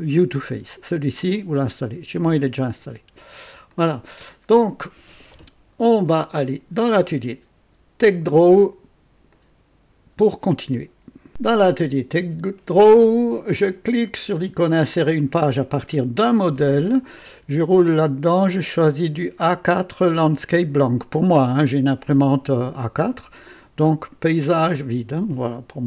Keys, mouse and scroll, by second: 3.7 click, 6.3 click, 9.3 click, 11.3 click, 15.9 click, 17.2 scroll down 2, 18.2 scroll up 2, 24.7 click.